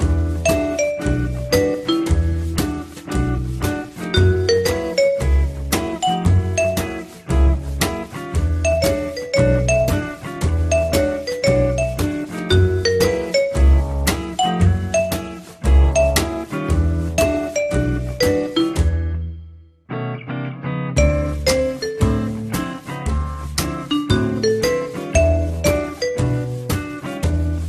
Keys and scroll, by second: 1.1 2, 23.6 t.